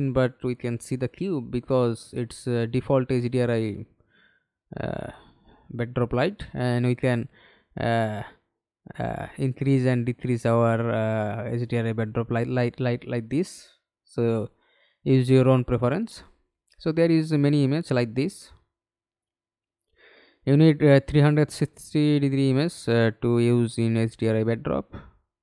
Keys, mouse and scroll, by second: 2.2 scroll, 2.5-2.9 scroll up 1, 14.4-15.0 scroll down 1.